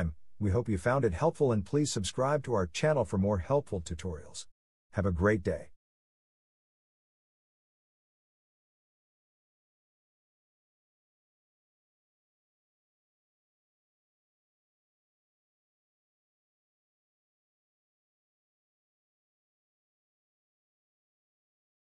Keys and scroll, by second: 14.3 typing.